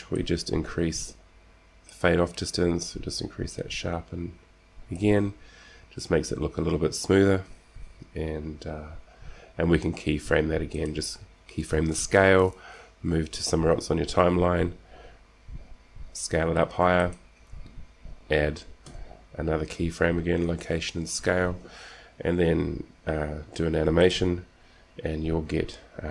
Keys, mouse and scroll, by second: 0.4-2.3 drag, 3.2-4.5 drag, 8.0 s, 15.5 s, 19.4 i, 24.3-26.1 drag.